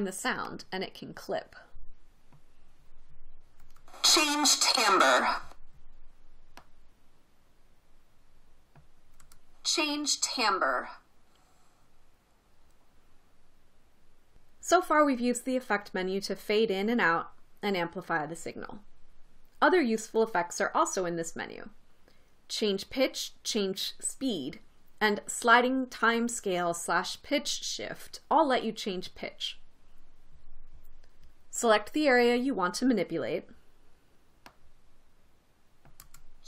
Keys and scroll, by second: 4.2 space, 5.8 space, 9.8 space, 12.7 space.